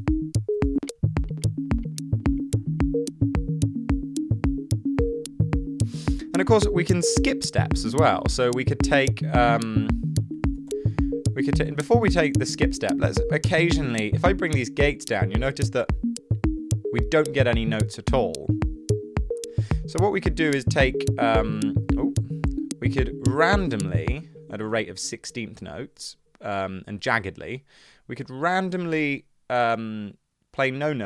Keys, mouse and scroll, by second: 0.0-0.7 typing, 10.2-11.5 typing, 22.2 super+z, 24.6 space.